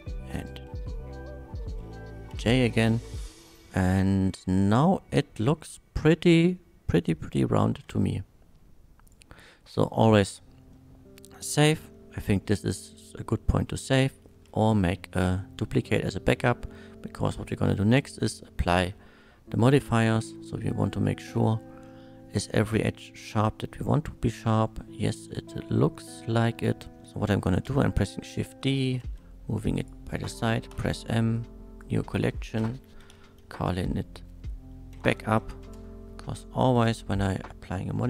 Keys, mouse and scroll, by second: 0.4 shift+click, 2.3 j, 2.9 Tab, 3.1 middle click, 4.0-4.4 middle drag, 4.5-7.2 middle drag, 7.8 ctrl+s, 9.1 click, 10.7 middle click, 11.5-11.9 scroll up 2, 11.9-13.5 scroll down 1, 13.5-14.1 middle drag, 19.8 click, 20.2 Tab, 20.8-21.5 scroll up 1, 21.6 shift+middle click, 22.5-26.6 shift+middle drag, 26.9 scroll down 1, 27.6 shift+d, 29.0 x, 29.8 click, 30.7 m, 31.3 click, 32.9-33.7 typing, 34.9 u, 35.4 p, 35.6 Return, 36.7 click.